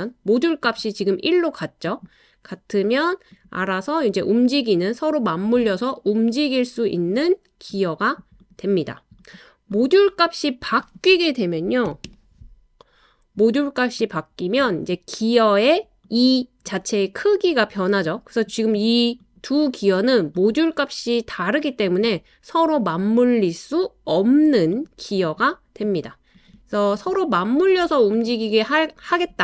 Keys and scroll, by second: 11.9 typing.